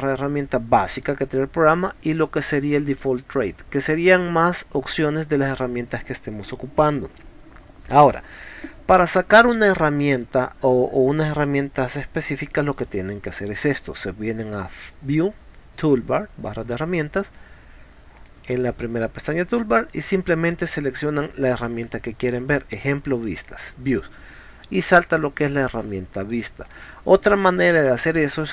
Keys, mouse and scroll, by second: 14.5 click, 16.5 click, 18.2 click, 20.9 click, 23.4 click, 26.7 click.